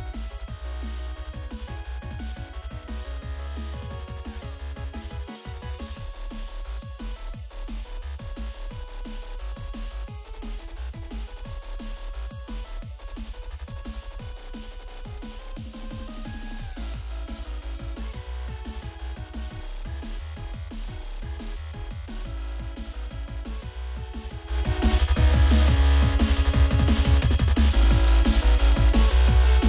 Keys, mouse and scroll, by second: 1.4 click, 1.6 click, 2.5 double click, 3.1 y, 5.8 click, 7.4 Escape, 7.4 click, 7.7 ctrl+click, 8.2 click, 8.4 double click, 9.3-11.3 typing, 11.3 Return, 12.9 F5, 14.0-15.4 typing, 16.9 a, 22.9-24.8 typing.